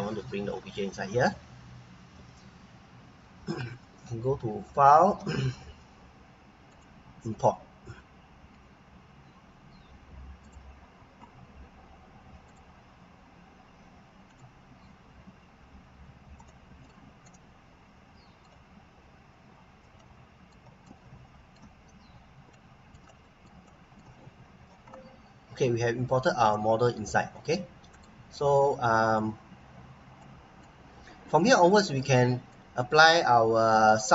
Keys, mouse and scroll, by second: 2.1 Delete, 2.6 scroll up 1, 3.8 scroll down 1, 4.6 click, 10.4 click, 16.3 middle click, 16.5 click, 17.2 right click, 18.7 scroll up 1, 20.0 right click, 21.8 scroll up 1, 22.5 right click, 23.0 right click, 23.6 right click, 25.7 scroll up 1, 26.1-26.4 scroll down 1, 26.5 right click, 29.0 click, 29.8 scroll down 1, 30.2 right click, 30.8 scroll up 1, 31.2 right click, 33.5 scroll down 1, 33.9 right click.